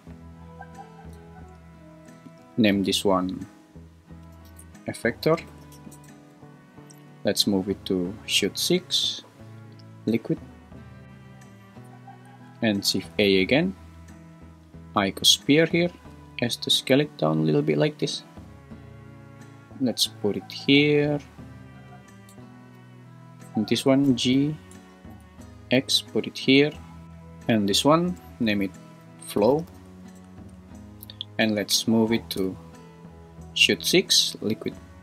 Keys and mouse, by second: 0.2 click, 2.3 F2, 6.9 m, 12.9 shift+a, 16.1 s, 17.9 g, 22.3 x, 22.7 click, 23.4 click, 24.0 g, 24.3 y, 24.7 Escape, 25.1 g, 25.4 x, 26.8 click, 28.5 F2, 30.5 Return, 32.4 m.